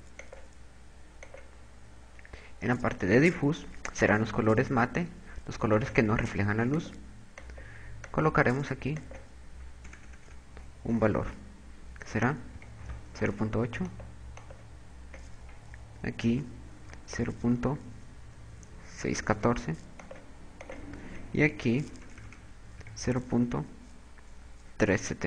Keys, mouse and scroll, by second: 4.8 click.